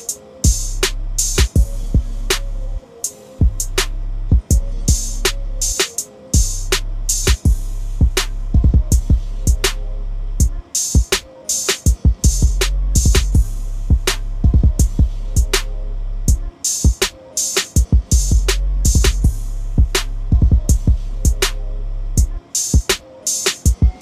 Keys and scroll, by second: 2.8 ctrl+i, 22.1 ctrl+i.